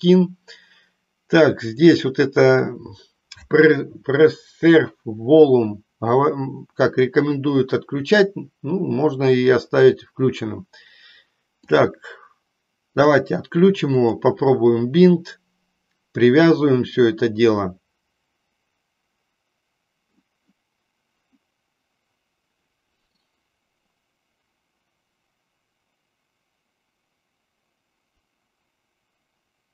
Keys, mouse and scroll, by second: 1.6 click, 13.0 click.